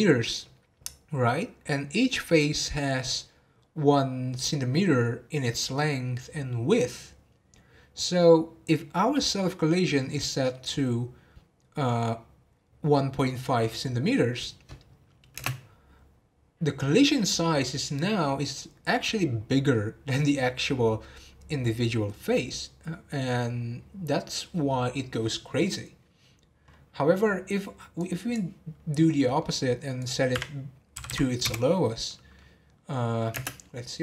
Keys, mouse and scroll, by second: 15.7 space, 28.0-29.0 drag, 29.0-30.0 middle drag, 30.0-31.1 drag, 31.1 m, 32.1-33.4 middle drag, 33.4 space.